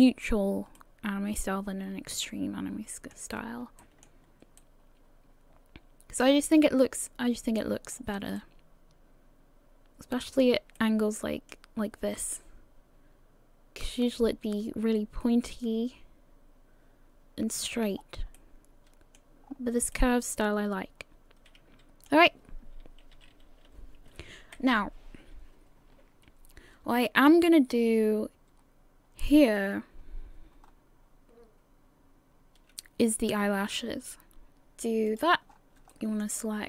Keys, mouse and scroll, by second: 0.8 middle click, 3.4 scroll up 2, 3.8 shift+middle click, 4.2-4.6 scroll up 1, 4.6 middle click, 7.9-9.8 scroll down 2, 8.4 middle click, 10.8 middle click, 18.0 scroll down 4, 18.4 middle click, 19.4 scroll up 4, 19.9 middle click, 23.1 a, 23.3 a, 24.5 KP_1, 30.6-33.8 scroll up 3, 34.5-35.1 scroll up 4, 34.5 KP_1, 35.1 click, 35.5 scroll up 2, 35.9 shift+middle click.